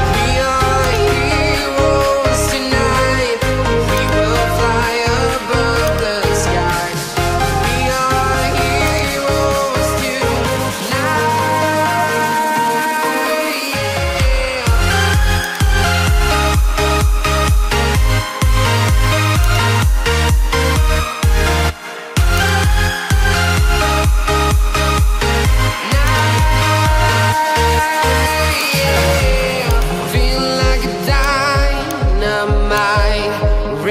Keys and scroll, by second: 2.0 ctrl+t, 11.3 Return, 27.0 ctrl+z, 30.4 ctrl+z.